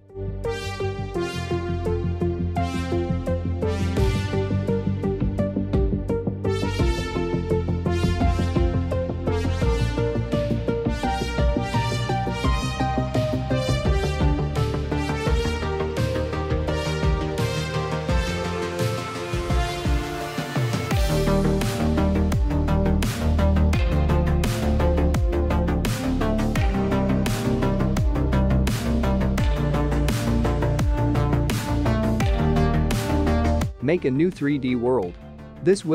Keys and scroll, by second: 32.8 space.